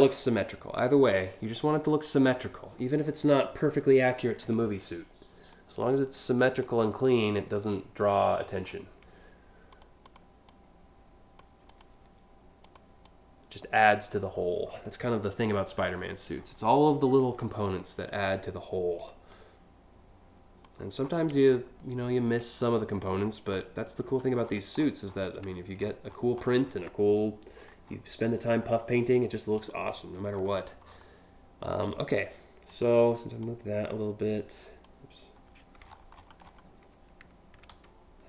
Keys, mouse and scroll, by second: 0.4 scroll up 2, 2.0 alt+scroll up 4, 2.7-3.9 alt+scroll up 2, 4.1 click, 5.2-6.3 drag, 6.5 scroll down 1, 7.1-7.7 alt+scroll down 2, 8.0-8.4 alt+scroll up 3, 9.3 click, 9.7 click, 10.1 click, 11.3 click, 12.3 click, 12.7 click, 13.8 scroll down 1, 14.3 alt+scroll down 5, 15.5 scroll down 1, 17.2 scroll up 1, 18.6 click, 18.9-20.3 drag, 20.7-21.3 scroll down 4, 22.2-22.8 scroll up 2, 23.2 scroll down 1, 23.7-24.6 scroll down 8, 24.7-26.4 scroll up 8, 27.2 scroll down 1, 27.5 scroll up 1, 28.0-28.9 scroll up 2, 29.2 click, 29.9 scroll down 1, 30.5 scroll down 1, 32.3 click, 33.0-34.5 drag, 35.5-36.0 alt+scroll up 3, 37.3 ctrl+z.